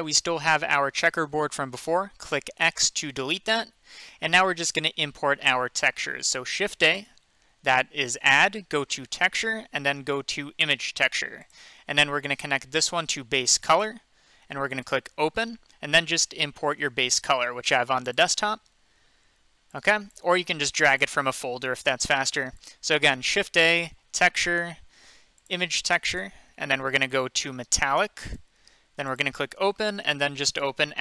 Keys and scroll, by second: 2.5 x, 6.9 a, 23.2 a.